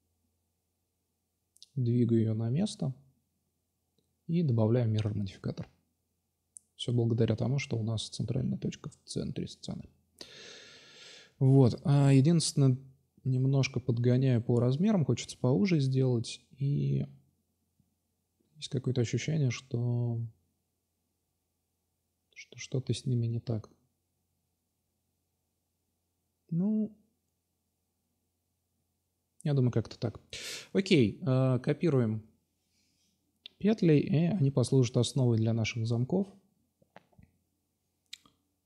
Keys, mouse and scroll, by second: 0.5 middle drag, 0.9 middle drag, 0.9 click, 1.2 Tab, 4.0-4.8 drag, 6.9 Tab, 8.4 s, 9.8 s, 13.6-15.8 right drag, 15.9-16.8 drag, 16.8 right click, 17.6 s, 18.5-18.8 drag, 19.1 a, 19.2 a, 19.6 s, 20.4 ctrl+z, 20.5 ctrl+z, 20.7 ctrl+z, 21.2 s, 21.9-22.8 drag, 25.2 Tab, 26.3 shift+d, 27.4 Tab, 28.3 a, 28.4 a, 29.7 r, 31.4-32.2 drag, 32.6 s, 34.9-35.2 middle drag, 35.4-38.6 drag.